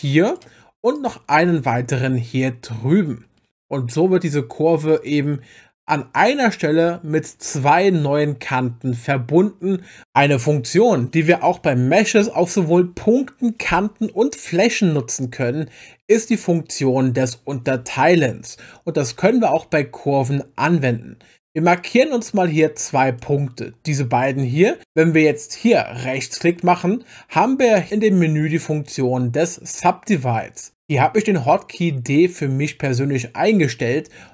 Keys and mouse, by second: 0.3 click, 1.0 click, 1.4 g, 1.7 x, 21.7-23.2 drag, 26.0-34.3 right drag.